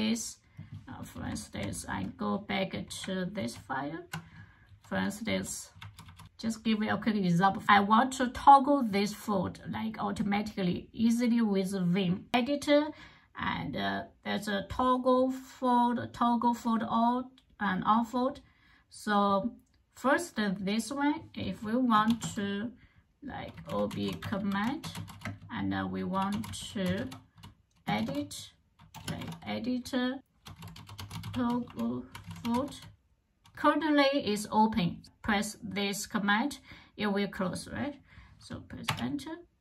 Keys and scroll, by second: 3.2 ctrl+o, 4.3-6.6 typing, 21.9 shift+;, 23.1-29.0 typing, 30.0-32.9 typing, 38.7 Return.